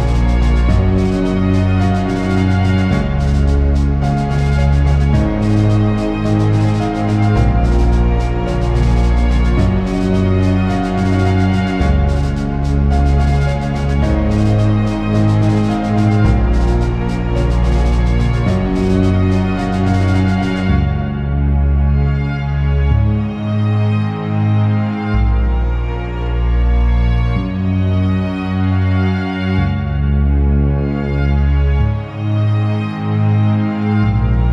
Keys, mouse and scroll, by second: 0.3 click, 0.7 scroll down 2, 0.9 alt+a, 1.1 scroll up 3, 1.4 scroll down 6, 1.7 scroll up 1, 2.4 click, 7.9 alt+a, 8.0 scroll down 3, 8.1 shift+middle click, 8.5-8.9 scroll up 4, 8.9 click, 9.1 Tab, 9.7 scroll up 1, 9.8 Tab, 10.1 click, 10.7 Tab, 11.0 alt+z, 15.1 p, 15.1 Tab, 15.2 alt+a, 15.7 click, 16.6 right click, 17.0 click, 23.1 click, 25.8 alt+a, 26.3 click, 26.5 Tab, 29.4 click, 29.8 alt+z, 29.9 Tab, 30.1 alt+a, 31.0 click, 31.4 alt+a, 31.9 click, 32.3 alt+d.